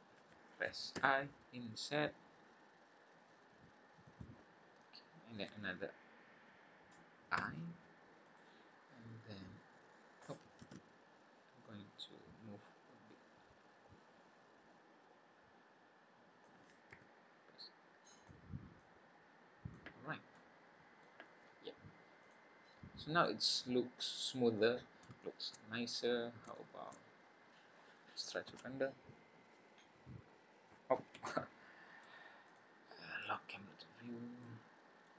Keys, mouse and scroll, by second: 0.9 i, 4.4-4.8 scroll down 3, 4.8 scroll up 2, 7.3 i, 9.3 click, 10.6 ctrl+z, 11.6 click, 16.9 s, 18.8 click, 20.0 scroll down 3, 20.3 middle click, 21.2-21.6 scroll down 3, 22.2 click, 22.5-22.9 scroll up 5, 23.2 middle click, 25.2 shift+middle click, 25.5 scroll down 1, 25.7-26.5 scroll up 7, 26.5 shift+middle click, 27.0 scroll up 2, 27.4 scroll down 2, 31.1 F12, 31.6 scroll down 2, 32.4 click, 33.2 click, 33.7 scroll down 2, 34.4 middle click.